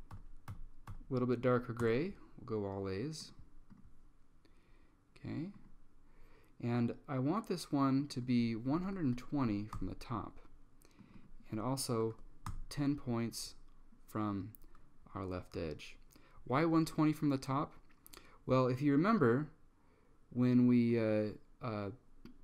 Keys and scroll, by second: 0.0-1.0 typing, 1.9 Return, 8.6-9.7 typing, 9.8 Tab, 11.9-12.7 typing.